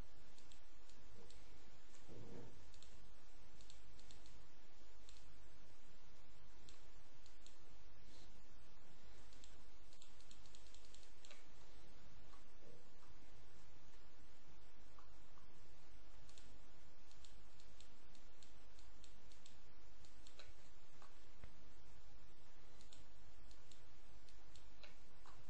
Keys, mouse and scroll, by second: 2.6 ctrl+click, 3.5-4.5 drag, 5.0 click, 7.1 click, 9.1-11.3 ctrl+drag, 11.3-12.7 ctrl+scroll down 1, 12.8-13.3 scroll down 1, 14.1-15.7 scroll up 1, 16.2 ctrl+click, 17.0 click, 18.1 click, 18.7 click, 19.2 click, 20.5 ctrl+click, 22.7 ctrl+click.